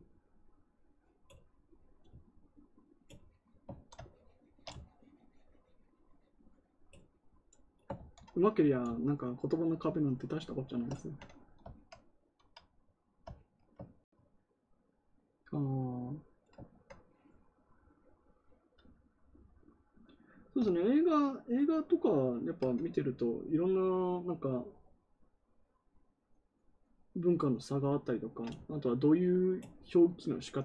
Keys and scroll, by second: 7.9 ctrl+z.